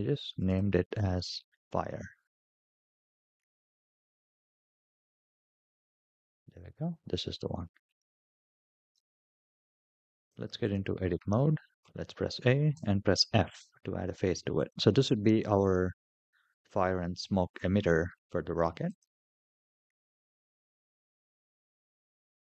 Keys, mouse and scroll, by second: 4.0 scroll down 4, 5.2 g, 8.7 /, 10.0-10.5 drag, 11.6 a, 12.5 f, 14.4-18.8 drag, 21.9 /.